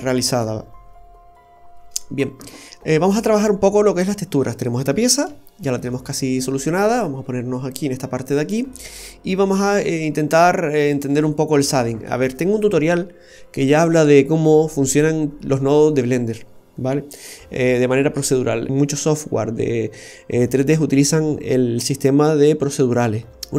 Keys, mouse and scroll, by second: 0.6-1.6 scroll up 1, 1.6 scroll down 1, 1.8 scroll down 1, 2.0 middle click, 4.3 middle click, 5.4 shift+scroll up 2, 5.7-6.2 scroll down 1, 7.5 click, 8.3-8.7 scroll up 1, 8.7 middle click.